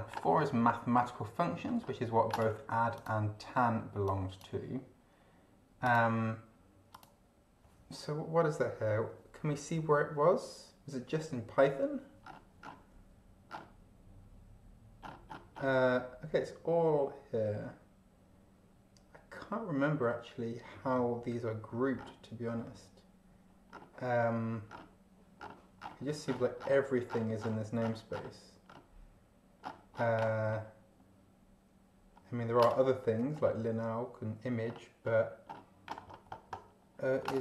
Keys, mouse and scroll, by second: 0.3-0.8 scroll up 2, 1.0-1.7 scroll down 4, 2.9 click, 4.0 click, 5.8 click, 6.9 click, 12.2-12.9 scroll down 4, 13.5 scroll down 2, 15.0-15.8 scroll up 2, 22.0 scroll down 2, 23.7 scroll down 2, 24.7 scroll down 2, 25.4-26.5 scroll down 6, 26.8-27.3 scroll down 4, 27.8-28.4 scroll down 2, 28.7 scroll down 2, 29.6 scroll down 2, 30.5-30.9 scroll down 2, 32.1 scroll up 2, 33.3 scroll up 2, 34.7-35.7 scroll up 6, 36.1-36.9 scroll up 2, 36.9 scroll up 1.